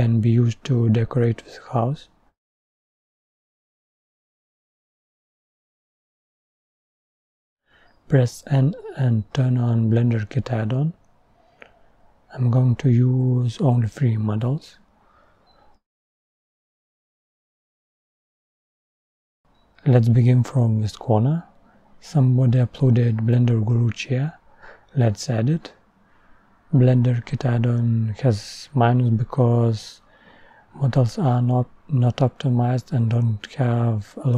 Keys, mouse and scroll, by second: 1.9-4.6 drag, 4.6-6.0 scroll up 1, 6.0-6.6 scroll up 1, 6.6-7.3 scroll up 1, 7.3 scroll up 1, 7.5-9.2 drag, 9.2 n.